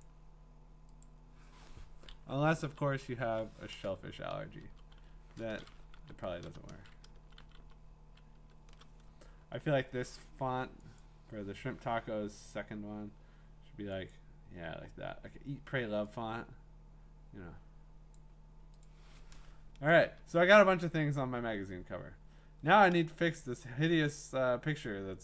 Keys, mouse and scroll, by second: 0.0 click, 1.0 click, 2.6 Down, 3.2 Down, 4.5 typing, 6.0 Right, 6.2 Left, 6.4 BackSpace, 7.2 ctrl+shift+Left, 7.4 ctrl+shift+Left, 7.6 ctrl+shift+Left, 8.3 ctrl+shift+Left, 11.0 click, 12.4 click, 12.9-14.0 drag, 14.1 click, 18.1 click, 18.9 click, 20.0 ctrl+Return, 20.9 scroll, 21.1-22.1 scroll down 14, 22.1 scroll up 5, 22.7 scroll, 23.2-24.7 scroll.